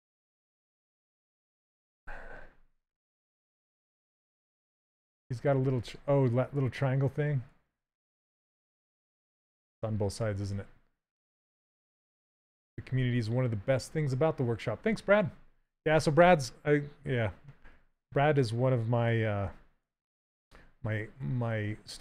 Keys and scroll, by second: 21.7 s.